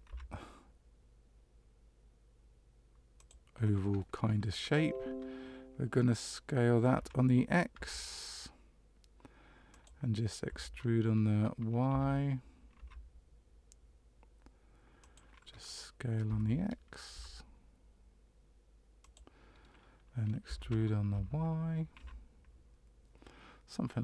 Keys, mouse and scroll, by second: 6.9 s, 10.4 e, 16.2 s, 20.4 e.